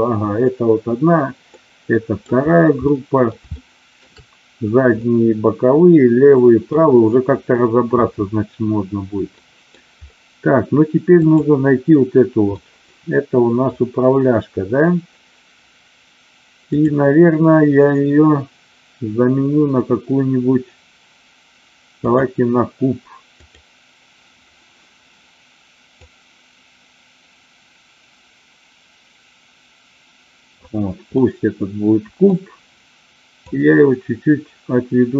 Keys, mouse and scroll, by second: 1.5-2.3 middle drag, 2.8-3.3 middle drag, 3.6 shift+middle click, 5.0-6.7 middle drag, 9.3 middle click, 11.2 click, 12.6-13.7 middle drag, 16.6-22.2 drag, 23.3 click, 26.0-30.4 drag, 31.1-32.4 middle drag, 33.5-35.1 drag.